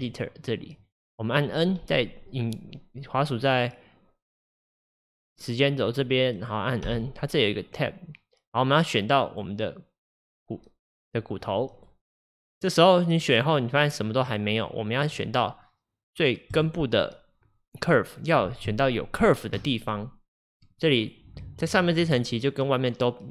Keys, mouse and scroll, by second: 6.9 n, 9.3-12.3 drag, 15.1-17.6 drag, 20.7-23.3 drag.